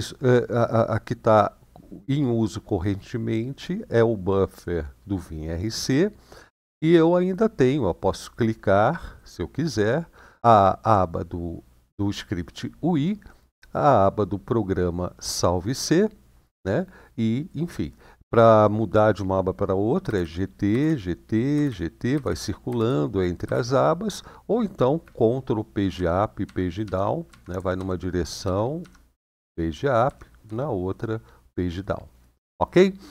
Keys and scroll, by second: 19.8-23.3 typing, 25.4-26.2 typing, 27.0 ctrl+Page_Down, 28.2 ctrl+Page_Up, 29.0 ctrl+Page_Up, 29.8 ctrl+Page_Down.